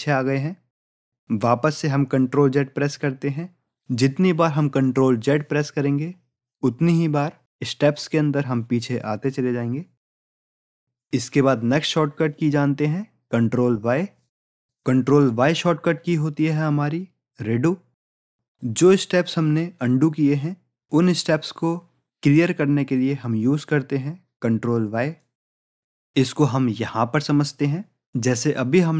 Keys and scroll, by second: 3.1 ctrl+z.